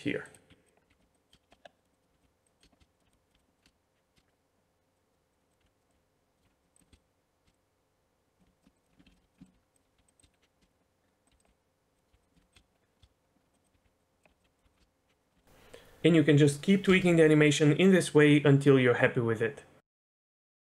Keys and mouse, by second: 0.0-1.0 typing, 1.3 click, 1.8 click, 2.1-3.1 typing, 2.6 click, 2.9 click, 3.5 click, 4.9 click, 5.3 click, 5.6-10.0 typing, 6.7 drag, 7.5 click, 9.0 ctrl+z, 9.4 shift+middle click, 10.2 click, 11.3 g, 11.4 click, 12.3 click, 12.5 shift+d, 12.5 space, 13.0 space, 13.5 click, 14.8 space, 16.9 space.